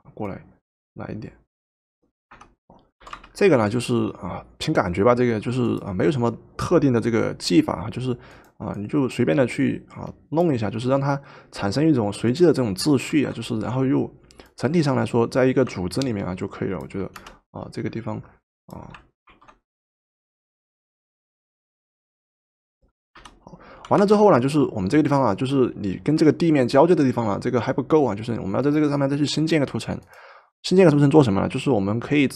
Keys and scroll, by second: 2.3 Return, 3.1 v, 13.1 ctrl+t, 17.2 Return, 19.3 ctrl+t, 23.2 Return, 23.9 v.